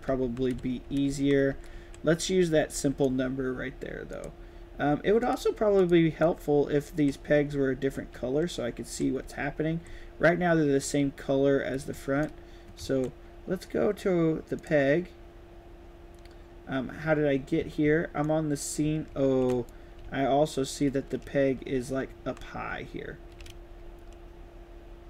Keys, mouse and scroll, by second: 0.0-2.9 typing, 1.2 right click, 5.1 click, 5.7 click, 6.2-8.9 right drag, 6.3-12.1 typing, 9.5 right click, 11.9 click, 12.9 ctrl+s, 14.5 click, 17.3 scroll up 1, 17.5 scroll down 1, 18.2-19.4 right drag, 18.8-20.5 typing, 21.6 shift+a, 22.4 shift+a, 22.6 shift+a, 23.7 d.